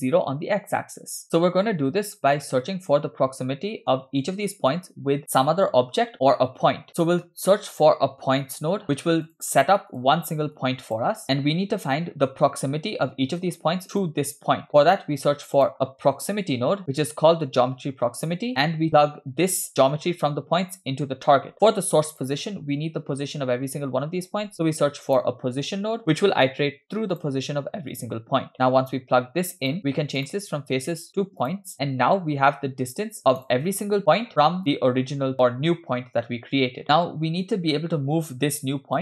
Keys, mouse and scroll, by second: 2.7-4.0 middle drag, 6.8-7.1 scroll down 2, 7.1 shift+middle click, 7.2 shift+a, 8.8 BackSpace, 10.6 click, 14.0 click, 14.2 click, 14.7 middle click, 15.0 shift+a, 18.9 middle click, 18.9-19.9 scroll up 3, 19.9 scroll up 1, 19.9-21.5 drag, 22.2 click, 24.7 shift+a, 28.5 click, 30.2-31.6 drag, 32.5 scroll down 2, 33.2 click, 34.6-36.8 drag, 37.5-39.0 drag.